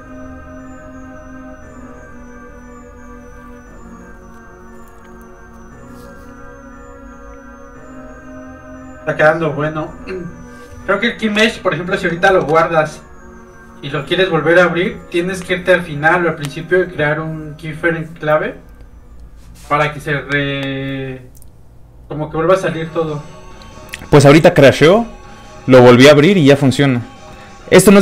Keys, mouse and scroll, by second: 11.3 alt+Tab, 27.4 middle click, 27.5 middle click, 27.8 scroll down 1, 27.9 middle click.